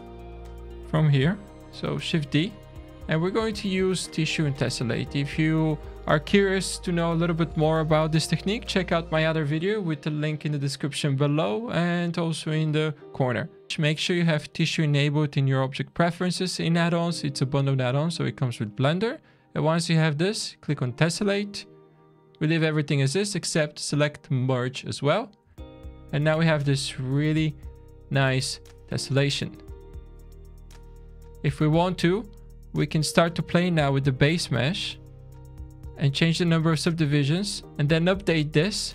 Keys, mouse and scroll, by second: 0.0 middle click, 0.5-0.9 scroll down 2, 2.1 shift+d, 3.1-3.8 scroll up 7, 4.5 shift+middle click, 5.5-5.8 scroll up 2, 13.6 shift+click, 19.6 click, 24.0 scroll down 4, 24.5 shift+middle click, 26.1 click, 27.2 shift+middle click, 29.3 alt+a, 29.8 click, 30.7 middle click, 33.4 click, 34.7 click, 35.7 click, 37.0 click, 37.7 alt+shift+a, 37.7 shift+middle click, 37.7 scroll down 3.